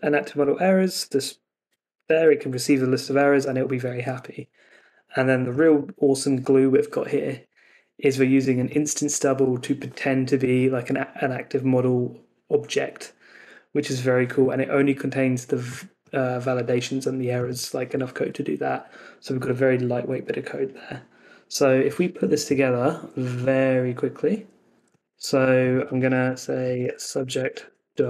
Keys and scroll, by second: 25.0 super+c, 25.7 Escape, 27.8 super+v.